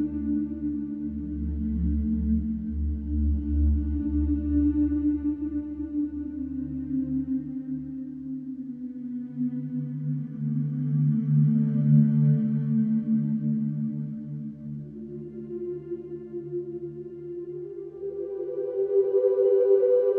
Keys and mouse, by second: 0.0 click, 2.9 super+d, 8.4 alt+click, 9.9 alt+click, 11.1 click, 11.7 click, 12.3 click, 12.7 click, 14.9 click, 15.9 click, 16.6-18.5 drag, 19.8 click, 20.0 click.